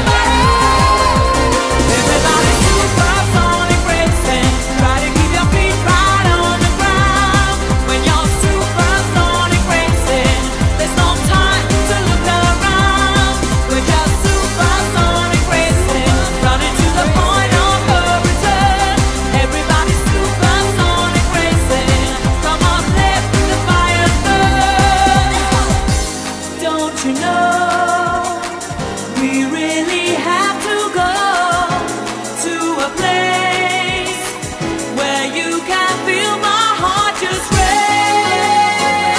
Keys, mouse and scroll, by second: 11.2 click, 16.1 click, 25.3 click, 38.5 click.